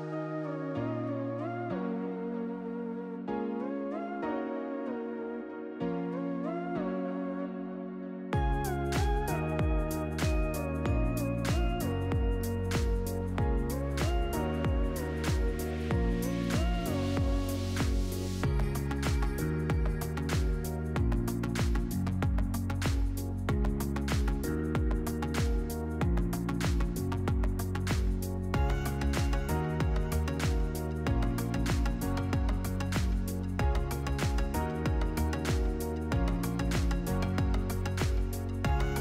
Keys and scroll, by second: 5.2 shift+d, 29.2 8, 29.6 Tab, 29.9 8, 30.4 Return.